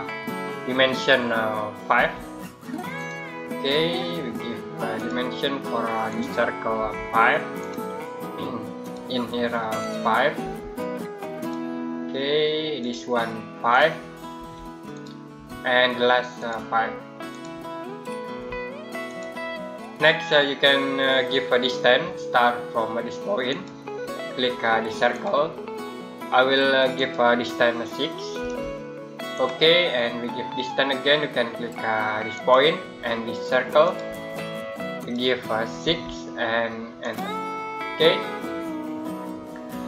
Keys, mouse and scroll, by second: 1.8 5, 2.8 click, 6.6 5, 7.4 click, 10.3 5, 11.2 click, 14.2 5, 14.8 click, 18.2 5, 18.9 click, 23.3 click, 28.2 6, 29.2 click, 32.2 click, 35.7 6, 36.9 click.